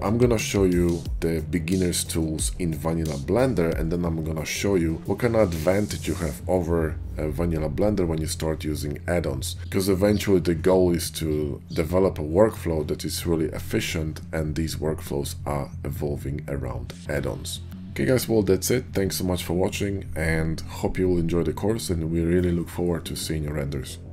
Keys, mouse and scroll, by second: 0.8 click, 2.0 ctrl+b, 3.3 click, 3.4 Tab, 3.7 shift+click, 3.8 ctrl+shift+b, 4.1 Tab, 4.6 click, 4.9 click, 5.2 click, 5.6 ctrl+KP_Subtract, 6.0 ctrl+Tab, 6.3 ctrl+click, 6.7 ctrl+click, 7.0 f, 7.1 click, 7.2 ctrl+z, 7.3 ctrl+click, 7.8 ctrl+b, 8.6 Tab, 9.1 shift+click, 9.4 1, 9.6 shift+g, 9.7 right click, 9.8 click, 10.2 ctrl+b, 11.8 shift+i, 12.0 e, 12.6-14.3 drag, 14.3 Tab, 14.3 ctrl+a, 14.3 middle click, 14.3 Tab, 14.9 middle click, 15.3 middle click, 15.5 ctrl+b, 16.8 shift+click, 17.0 middle click, 17.2 Tab, 17.7-19.2 typing, 20.0 ctrl+j, 20.0 ctrl+h, 21.3 click, 21.7 click, 22.1 ctrl+z, 22.2 click, 22.5 click, 23.2 ctrl+KP_Subtract, 23.2 ctrl+KP_Add, 23.3 ctrl+z, 23.5 `, 23.6 `, 23.7 click, 24.0 click.